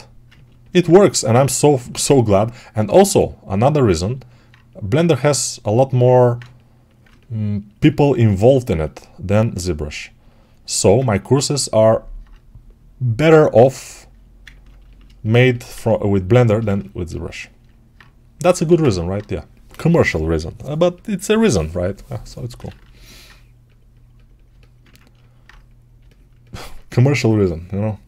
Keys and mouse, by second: 3.7-9.4 ctrl+alt+drag, 9.4 right click, 10.0-14.3 shift+drag, 14.3-16.2 ctrl+alt+right drag, 16.2-17.8 alt+shift+drag, 17.8-28.0 right drag, 18.4 alt+q.